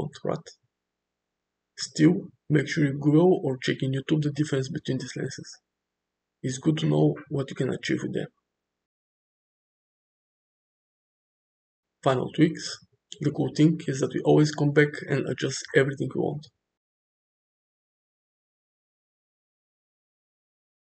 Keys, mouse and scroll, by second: 1.2 g, 6.1 middle click, 6.9 shift+d, 7.0 g, 7.4 r, 8.3 click, 8.8 click, 10.0 click, 10.7 g, 11.0 KP_0, 11.4 r, 11.6 g, 12.3 shift+middle click.